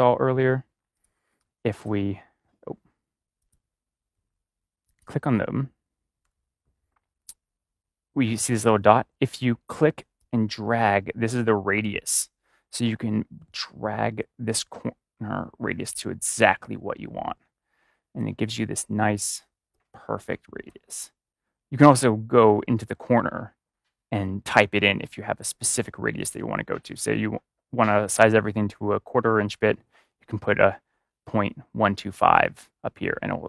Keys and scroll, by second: 6.1 v, 6.3 a.